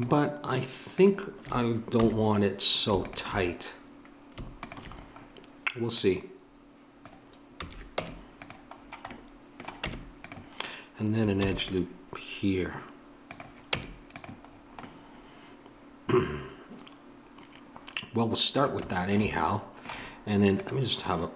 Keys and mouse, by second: 2.0 a, 4.6-8.0 drag, 7.6 a, 8.0 Tab, 9.8 Tab, 11.3 ctrl+r, 13.7 Tab.